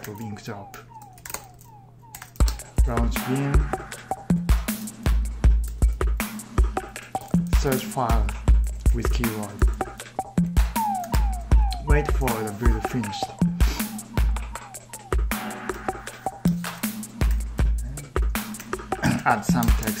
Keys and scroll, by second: 0.0-4.5 typing, 4.6 Return, 5.5 Return, 6.4-8.0 typing, 10.9 ctrl+t, 11.3-12.3 typing, 15.5 super+Tab, 16.3 super+Tab, 16.9-19.4 typing.